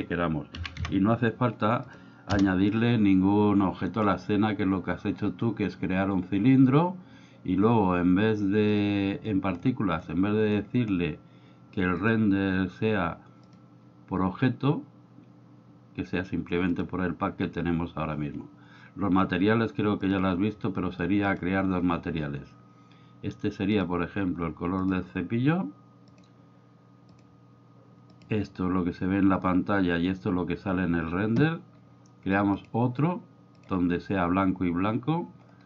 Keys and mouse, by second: 0.0-1.9 drag, 2.3 Return, 8.7 drag, 12.0 click, 13.5-16.9 drag, 20.1 click, 21.3 click, 23.8 drag, 32.5 click, 33.6 drag.